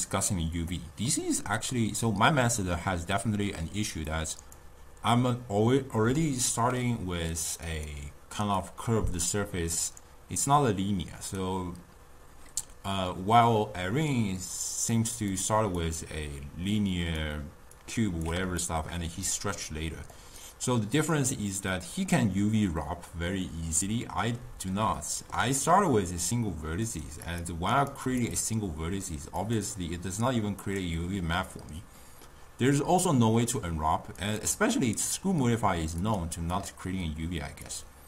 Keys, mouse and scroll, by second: 4.2-7.2 drag, 7.4-11.7 drag, 14.0-15.0 d, 15.0 click, 15.3-15.9 d, 16.0-17.2 drag, 17.2-17.5 d, 17.8-18.2 drag, 18.2 d, 18.6-19.3 shift+middle drag, 19.3 d, 19.7 click, 20.2 d, 20.5 right click, 21.2-21.7 d, 21.8 click, 22.2 d, 25.0-26.9 shift+middle drag, 26.9 click, 27.3 click, 27.8 click, 28.1 click, 29.5 click, 30.7-33.7 drag, 34.3 click, 36.1-38.0 drag.